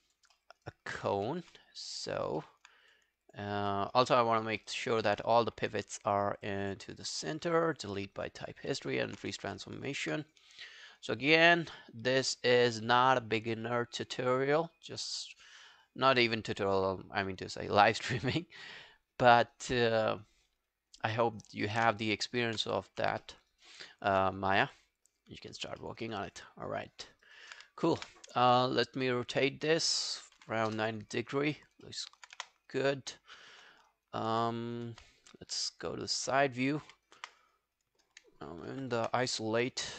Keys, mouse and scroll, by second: 0.4 alt+middle click, 0.6 alt+right click, 1.3 ctrl+z, 2.4 alt+middle click, 3.3 double click, 3.7 alt+middle click, 4.0 alt+right click, 4.3 alt+click, 4.6 alt+middle click, 4.8 alt+right click, 6.7 double click, 6.9 double click, 7.3 alt+middle click, 7.5 alt+right click, 7.7 alt+click, 8.0 alt+middle click, 8.2 alt+right click, 8.4 alt+click, 8.7 alt+middle click, 8.9 alt+right click, 9.2 w, 9.6 alt+middle click, 9.8 alt+right click, 22.1 alt+middle click, 22.5 alt+scroll up 1, 23.2 alt+middle click, 23.5 alt+right click, 23.8 alt+click, 25.8 alt+middle click, 26.0 alt+right click, 27.1 alt+middle click, 27.3 alt+right click, 27.9 ctrl+a, 30.2-31.1 typing, 31.9 alt+middle click, 32.1 alt+right click, 32.4 space, 33.5 space, 35.0 space, 35.9 scroll down 1, 37.2 space, 37.9 space, 38.7 ctrl+`, 39.2 ctrl+scroll down 1, 39.9 alt+middle click.